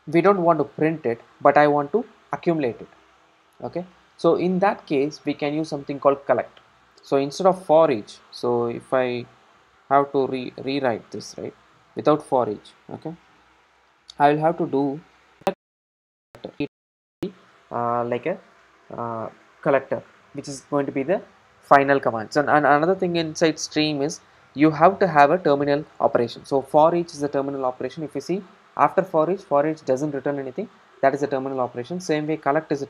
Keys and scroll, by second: 10.5 super+c, 11.7 super+v, 13.6 super+v, 13.7 super+x, 16.3 Return.